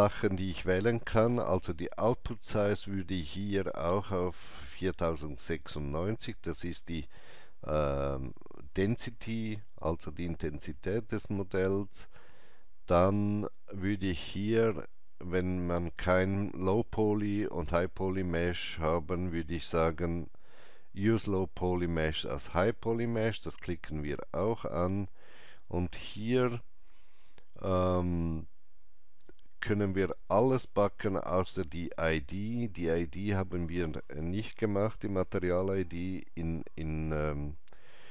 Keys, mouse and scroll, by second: 3.2 click, 4.5 click, 23.0 click, 24.0 click, 31.7 click.